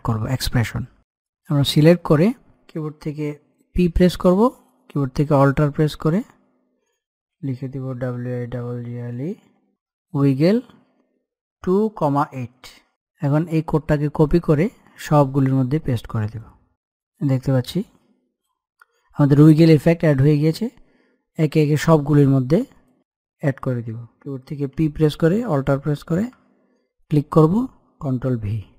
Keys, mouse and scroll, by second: 1.1 click, 1.5 click, 3.8 p, 4.5-5.2 scroll down 1, 5.4 alt+click, 7.9-12.9 typing, 13.3 click, 14.2 right click, 15.3-20.4 drag, 24.6 p, 27.0 alt+click, 28.6 ctrl+v.